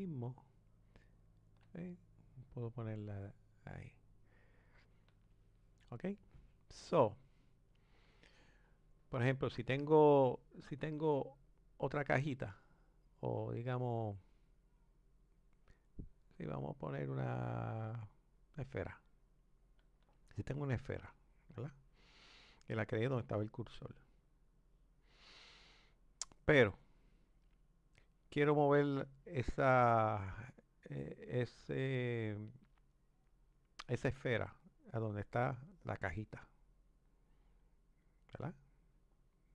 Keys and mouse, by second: 8.5 click, 11.5-14.6 drag, 35.8 click.